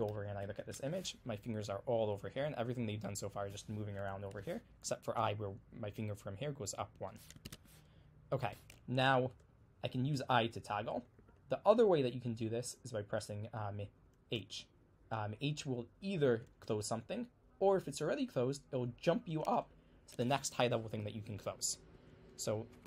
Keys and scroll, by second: 0.6 super+2, 7.5 super+Tab, 10.3-11.2 typing, 14.4 h, 16.4 typing.